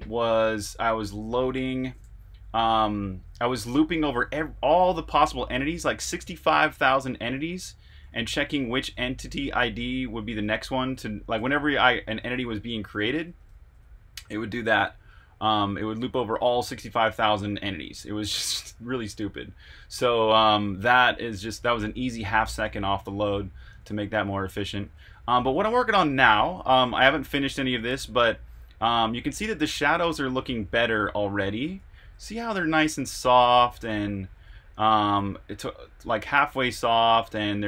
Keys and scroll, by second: 1.9-28.0 typing, 29.4-32.5 typing, 34.4-36.5 typing.